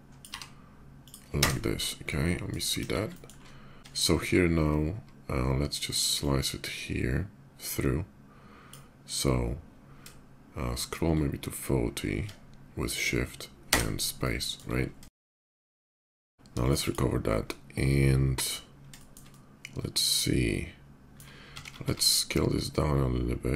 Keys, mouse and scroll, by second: 0.2 b, 0.8 click, 1.1 space, 1.6 middle drag, 1.8-2.2 middle drag, 2.6 KP_5, 2.9 shift+middle drag, 3.6 click, 5.9-8.5 shift+drag, 10.2 shift+middle click, 11.2 shift+middle click, 13.4 space, 14.0-14.3 middle drag, 14.0 drag, 14.4-14.8 middle drag, 14.9 shift+middle drag, 15.1 KP_5, 15.4 shift+middle click, 15.5 middle drag, 15.7 click, 15.8 middle click, 16.1 q, 16.4 click, 16.5 middle click, 16.6 click, 16.7 middle click, 17.2-18.2 middle drag, 18.7 shift+middle click, 19.1-20.9 shift+middle drag, 21.2 s, 21.7 z.